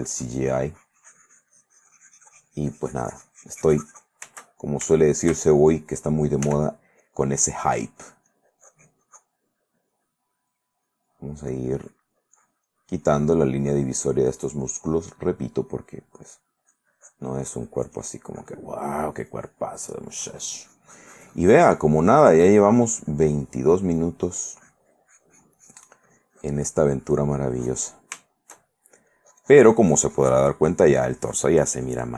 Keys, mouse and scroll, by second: 4.5-6.2 shift+middle drag, 6.6 f, 7.2 click, 7.8-10.4 drag, 10.5 click, 13.0 click, 13.4-15.3 drag, 15.9 middle click, 16.4-18.9 drag, 19.3 middle click, 20.8-23.9 drag, 24.0-27.2 drag, 27.5 click, 28.4 shift+middle click, 28.9 shift+middle click, 30.5-32.1 shift+drag.